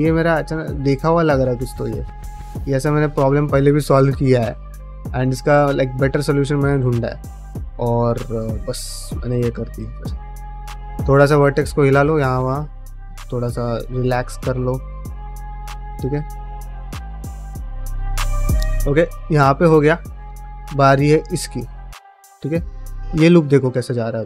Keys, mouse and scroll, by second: 0.3 g, 0.7 click, 1.4 g, 2.1 click, 2.4 click, 2.8 click, 3.5 g, 4.1 click, 4.2 g, 4.9 g, 5.3 click, 5.5 g, 5.8 middle click, 6.5 middle click, 6.9 click, 7.0-10.1 typing, 7.5 click, 8.1 click, 8.6 click, 9.3 click, 9.9 click, 10.7 middle click, 11.1 click, 11.2-14.9 typing, 11.6 click, 12.1 click, 12.7 click, 13.3 click, 13.9 click, 14.4 middle click, 14.8 click, 15.2 middle click, 15.5 ctrl+middle click, 15.7-17.2 middle drag, 17.4 ctrl+middle click, 17.7 middle click, 18.1 shift+middle click, 18.3 middle click, 18.7 shift+middle click, 19.0 middle click, 19.5 shift+middle click, 19.7 middle click, 20.2 middle click, 20.9 middle click, 21.4 shift+middle click, 21.7 middle click, 22.7 3, 23.1 alt+click, 23.5-24.2 middle drag.